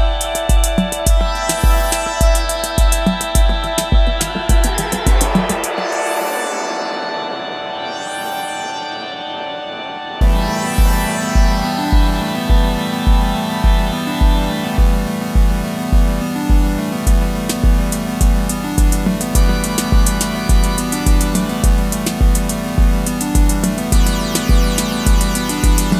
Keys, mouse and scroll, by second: 3.7 Return, 4.6 Up, 25.2-25.7 typing.